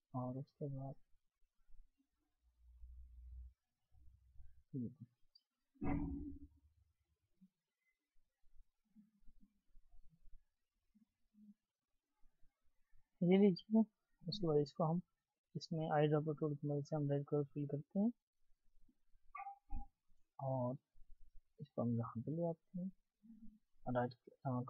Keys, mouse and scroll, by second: 11.0-12.5 alt+scroll down 1, 12.5-13.0 scroll down 1, 13.0 scroll up 1, 13.2 scroll down 1, 13.4-13.8 scroll up 1, 18.6 scroll up 1, 18.6 double click, 24.2 double click.